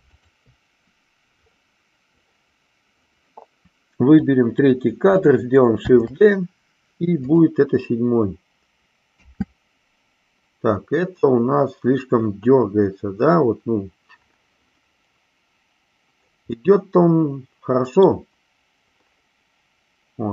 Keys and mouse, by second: 4.2 click, 5.8 shift+d, 9.2 space, 16.7-18.2 middle drag.